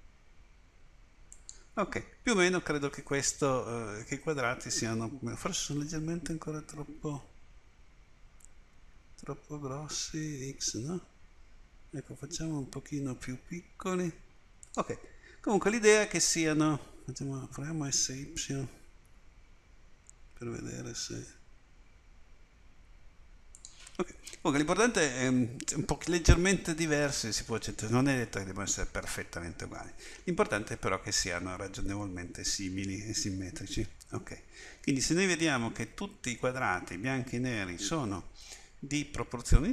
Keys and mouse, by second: 6.9 s, 18.5 s, 34.2-35.4 middle drag, 36.1 middle click.